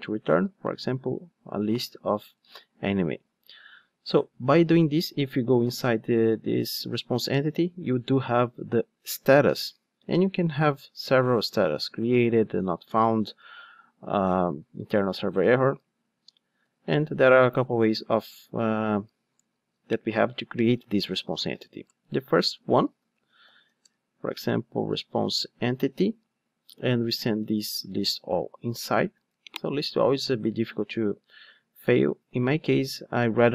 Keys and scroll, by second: 2.4 Return, 5.6 super+b, 11.0 ctrl+Tab, 21.9 Return, 22.4 super+z, 23.8 super+z, 23.8 Return, 24.3 super+z, 25.5 super+z, 25.6 Return, 26.7 alt+shift+Right, 28.4 super+x, 28.9 super+v.